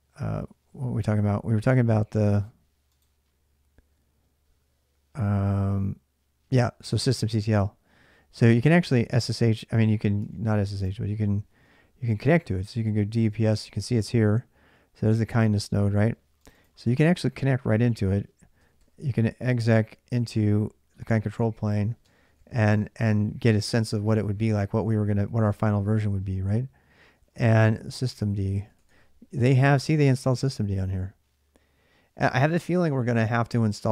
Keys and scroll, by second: 9.1 super+Tab, 12.3-13.6 typing, 17.5-20.4 typing, 21.8-24.5 typing, 26.7-29.3 typing.